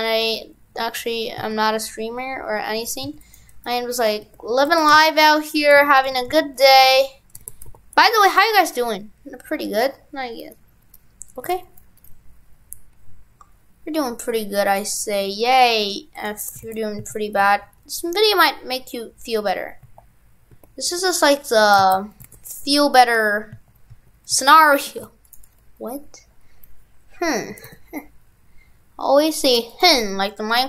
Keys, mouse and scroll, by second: 3.5 right click, 4.2 Tab, 4.7 shift+f, 6.2 shift+f, 6.8 right click, 7.3 right click, 7.4 shift+f, 16.7 shift+f, 22.0 ctrl+z, 22.2 shift+f.